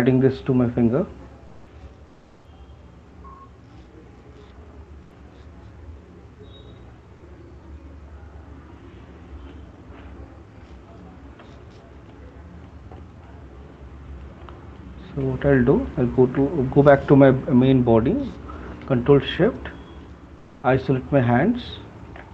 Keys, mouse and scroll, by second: 0.3 click, 0.5 click, 1.3 click, 1.5 click, 3.4 click, 5.2 alt+click, 6.7 click, 7.4 click, 8.1 alt+click, 9.0 click, 10.2 shift+click, 10.4 shift+click, 11.4 f, 13.0 right click, 14.4 shift+click, 15.2 right click, 15.5 shift+click, 16.3 alt+click, 20.4 click, 22.1 middle click, 22.1 right click.